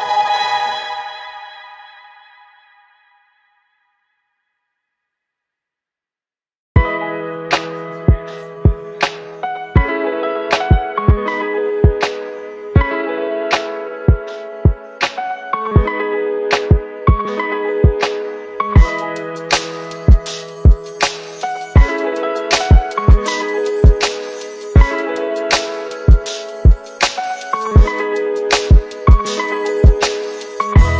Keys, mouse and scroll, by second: 0.7 shift+click, 4.3 click, 10.4 click, 12.8 click, 14.8 click, 16.7 ctrl+c, 19.2 click, 21.8 ctrl+v, 23.2-24.1 click, 25.8-27.6 scroll up 1, 30.1 r.